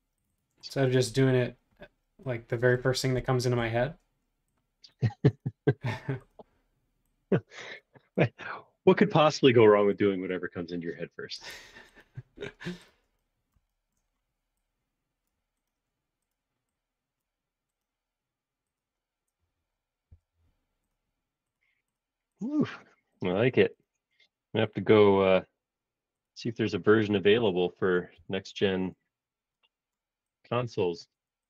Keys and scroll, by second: 20.1 b, 23.3 space, 23.5 Escape, 28.1 BackSpace.